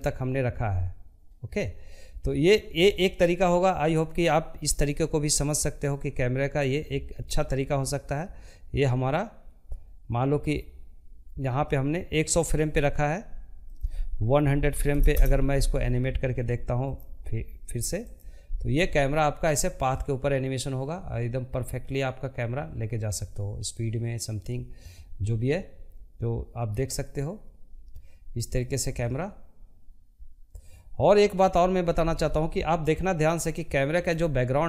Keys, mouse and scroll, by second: 15.4-19.4 drag, 29.8-34.6 drag.